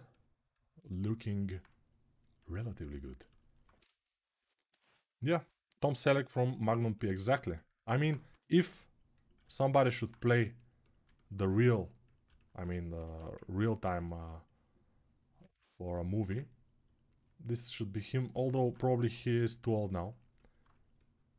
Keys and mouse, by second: 6.6-9.9 ctrl+alt+right drag, 8.1 g, 12.8 1, 15.8-21.3 ctrl+right drag, 18.9 6.